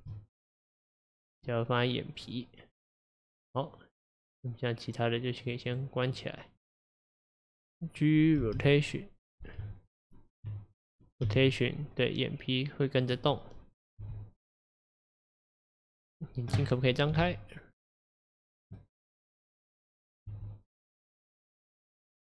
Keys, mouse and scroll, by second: 5.5 click, 6.1 click, 6.6 click, 8.0 click, 8.5 g, 9.7 Tab, 11.3 g, 13.3 middle click, 14.1 g, 16.1 click, 17.2 r, 18.8-19.9 middle drag, 19.9 click, 20.4 r.